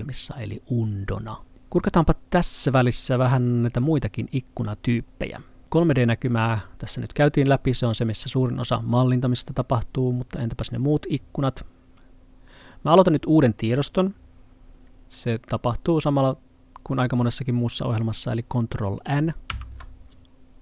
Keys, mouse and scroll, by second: 19.5 n.